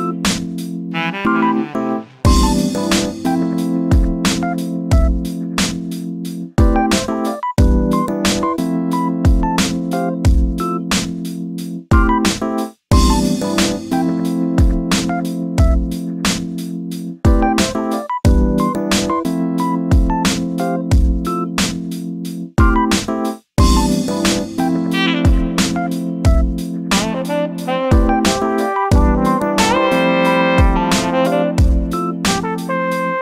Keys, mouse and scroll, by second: 0.1-1.1 shift+middle drag, 1.1 shift+right click, 1.5 shift+a, 2.4 s, 4.1 g, 4.9 s, 5.9 shift+middle click, 6.6 shift+d, 9.9-11.5 scroll down 4, 13.8-15.9 shift+middle drag, 15.9 click, 17.1 shift+d, 20.1 shift+d, 22.0 shift+d, 24.0 shift+r, 24.4 shift+r, 25.2-25.8 scroll up 3, 25.8 ctrl+z, 26.6 ctrl+z, 27.7 shift+d, 32.5 shift+d.